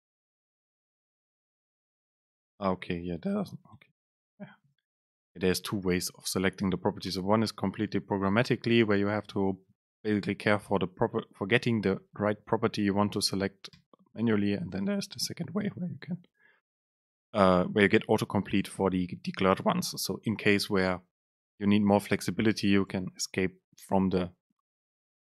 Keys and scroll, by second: 2.4 super+space, 3.5 BackSpace, 4.3 Escape, 5.0 super+space, 13.9 BackSpace, 14.3 super+space.